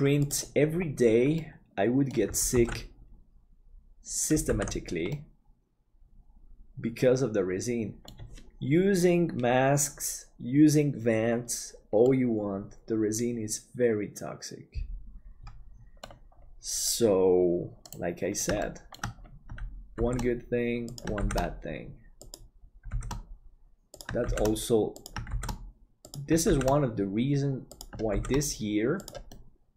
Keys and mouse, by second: 1.3 middle click, 3.2 ctrl+s, 4.5 alt+a, 5.1-8.2 middle drag, 12.1-16.0 middle drag, 18.5 shift+middle click, 20.0 shift+d, 24.4 shift+d, 29.2 middle click.